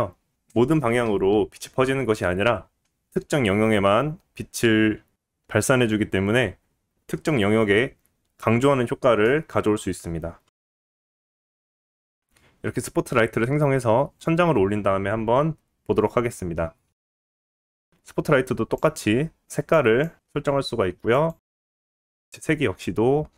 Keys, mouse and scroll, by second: 0.4 scroll up 3, 2.4 scroll down 1, 3.8-10.0 drag, 9.4 scroll down 1, 10.2 click, 10.6 click, 10.9 click, 12.6 shift+a, 14.1 g, 17.5 click, 17.7-22.1 middle drag, 22.1-23.3 drag.